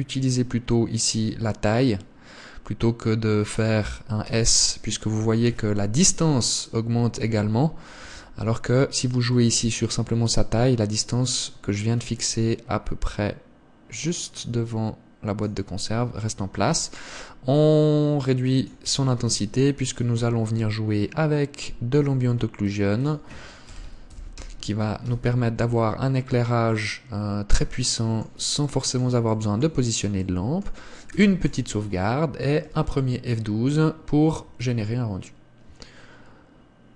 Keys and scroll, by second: 31.5 ctrl+s.